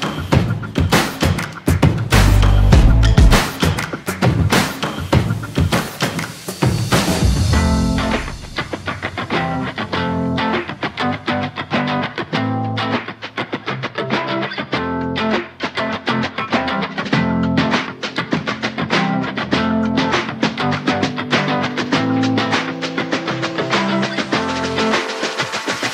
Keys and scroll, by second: 24.3 ctrl+c, 24.9 ctrl+v.